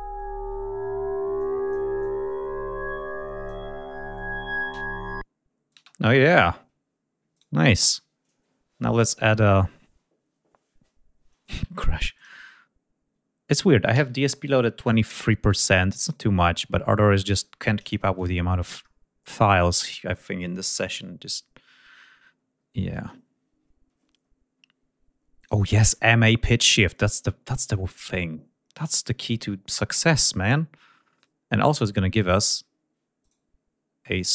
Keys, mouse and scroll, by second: 1.0 click, 1.6-3.3 drag, 5.4 space, 5.9 click, 7.0-9.5 right drag, 11.8 click, 13.6 ctrl+s, 18.5-19.1 scroll down 2, 25.0 click, 29.9-32.1 drag, 32.8 right click, 33.8 click.